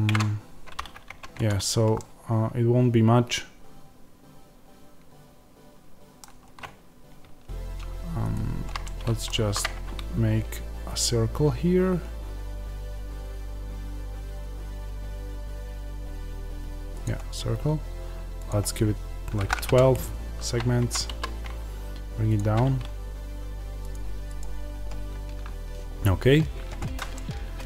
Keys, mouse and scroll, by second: 0.0 s, 1.0 Tab, 1.4 click, 1.9-8.1 middle drag, 8.1 shift+right click, 8.7-19.6 middle drag, 9.3 shift+a, 19.6-22.3 drag, 20.7 Tab, 21.0 s, 27.1-27.6 middle drag.